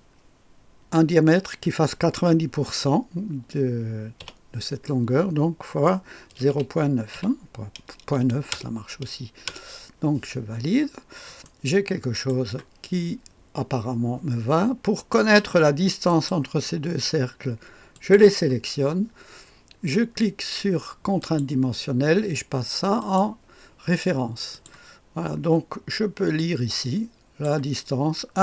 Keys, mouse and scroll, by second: 4.2 *, 6.3 KP_0, 6.4 ., 7.1 KP_9, 8.5 Return, 9.4 Return, 10.8-11.4 scroll up 1, 11.4 click, 12.3 right click, 16.0 click, 17.9 click, 21.1 click, 22.9 click, 24.5 click, 26.3-27.8 drag.